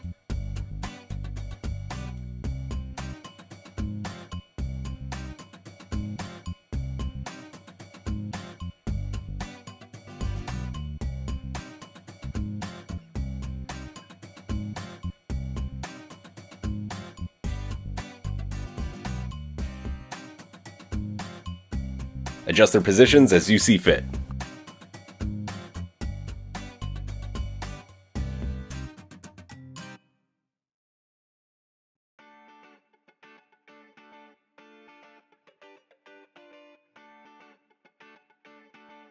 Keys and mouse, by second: 2.1-4.0 drag, 4.0-9.3 alt+middle drag, 4.2 alt+s, 9.5-13.1 middle drag, 10.2 alt+s, 13.9 click, 16.5 alt+s, 19.9 click, 20.1 g, 22.3-25.9 middle drag, 22.6 g, 25.9 click, 26.0-27.9 middle drag, 29.1 g, 31.1-32.6 drag, 33.6 g, 35.6-37.4 drag, 37.8 g, 38.5-39.1 middle drag.